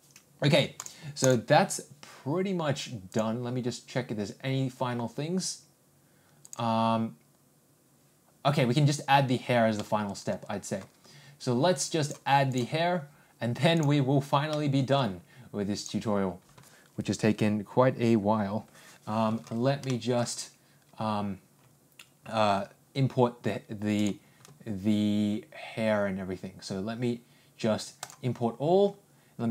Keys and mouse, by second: 0.7-1.4 ctrl+drag, 3.4-5.9 drag, 7.3 click, 9.7-10.2 middle drag, 12.0-12.5 drag, 14.5 middle click, 15.9 click, 19.9 shift+middle drag, 20.3 click, 23.9 click, 28.0 click.